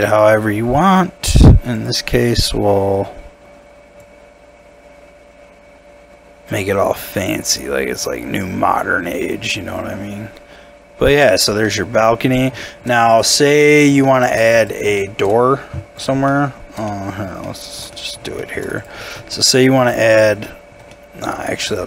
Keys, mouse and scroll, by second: 11.6 middle click, 13.7 middle click, 14.0 shift+middle click, 15.0 shift+middle click, 16.3 shift+middle click, 17.4 shift+middle click, 18.4 shift+middle click, 19.3 shift+middle click, 20.4 shift+middle click, 20.9 shift+middle click.